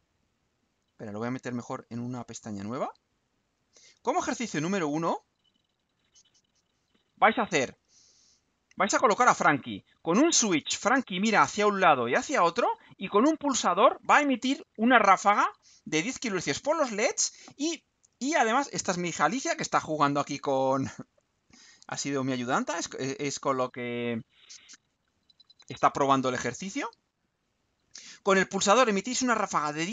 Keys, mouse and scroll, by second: 0.6 click, 1.6 right click, 3.2 click, 4.1 click, 22.0 scroll down 2, 23.0 click, 27.6 click.